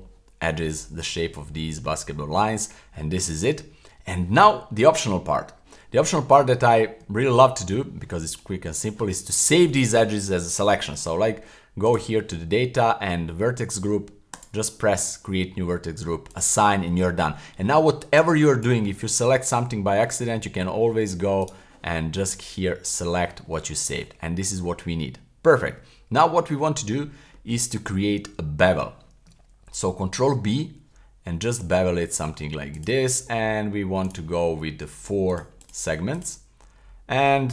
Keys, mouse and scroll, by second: 0.0 middle click, 0.6 middle click, 1.5 middle click, 3.1 shift+z, 3.3 middle click, 6.2 scroll up 1, 7.1 shift+middle click, 7.4 middle click, 7.8-8.1 scroll down 1, 11.8 click, 14.3 click, 16.3 click, 17.2 middle click, 18.2 click, 21.4 right click, 22.9 click, 23.5-24.5 middle drag, 24.7-26.2 middle drag, 26.5-27.3 middle drag, 27.5-27.9 scroll up 1, 27.9 middle click, 30.2 super+b, 32.7 click, 34.1 click, 35.3 click, 35.6 click, 36.1 click.